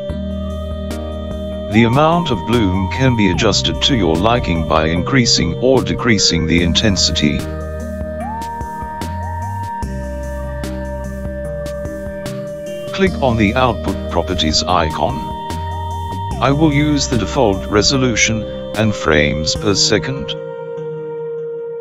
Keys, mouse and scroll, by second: 2.5 click, 8.8 click, 15.8 click.